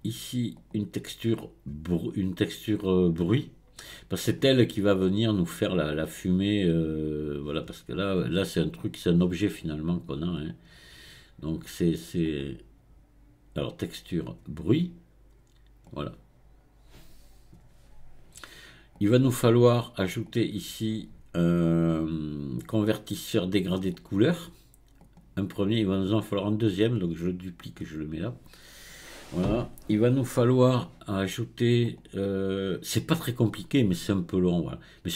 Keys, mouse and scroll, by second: 0.6-3.7 drag, 10.4-15.4 drag, 20.3-23.5 drag, 25.5 click, 25.8-28.8 right drag, 31.9-35.0 drag.